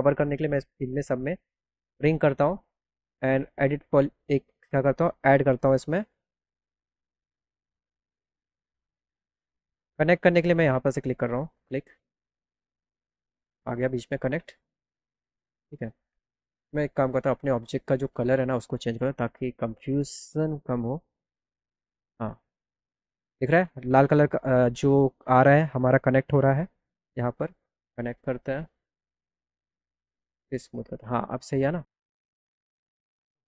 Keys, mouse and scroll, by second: 0.6 click, 1.9 click, 3.0 right click, 4.0 right click, 7.1 click, 9.8 right click, 11.3 click, 17.2 right click, 17.8 right click, 18.1 right click, 20.8 click, 21.4 click, 26.5 click, 28.0 click, 29.0 click, 30.3 click, 32.0 click, 32.5 click.